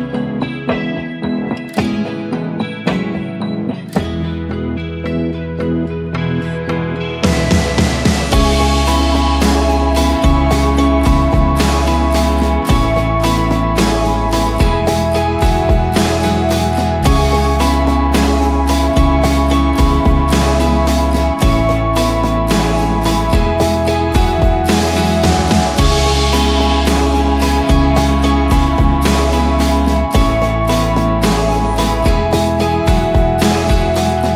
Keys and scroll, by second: 7.5 ctrl+shift+g, 9.6 ctrl+d, 11.8 Up, 11.9 Up, 12.2 Up, 15.9 ctrl+d, 16.2-16.6 Left, 16.9 Left, 17.2 Left, 20.4-24.2 typing, 25.9 ctrl+a, 26.9 ctrl+d, 27.3 shift+Right, 27.5 shift+Right, 28.8 shift+Right, 28.8-29.4 shift+Down, 30.1 ctrl+0, 33.4 ctrl+t.